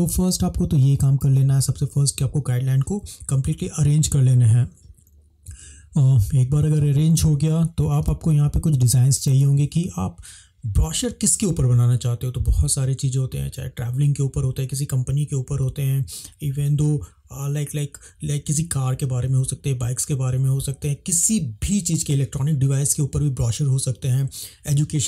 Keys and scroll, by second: 8.1 space.